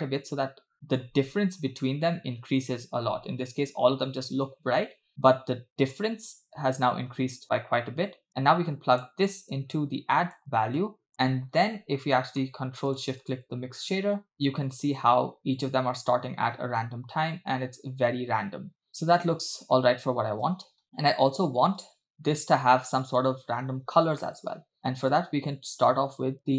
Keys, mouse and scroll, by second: 8.3 click, 9.6 click, 10.8 drag, 11.6-12.2 scroll down 5, 12.2 middle click, 13.0 click, 14.6 space, 15.1-16.6 scroll up 4, 20.5 space, 21.8-23.3 drag, 24.2 middle click, 25.2 click, 26.2-26.5 scroll up 4.